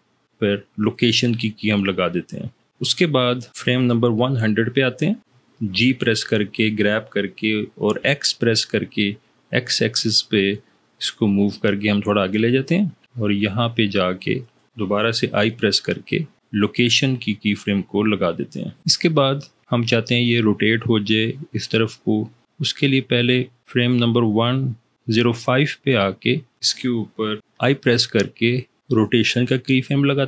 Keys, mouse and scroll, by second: 5.7 g, 7.8 x, 15.3 i, 27.4 i.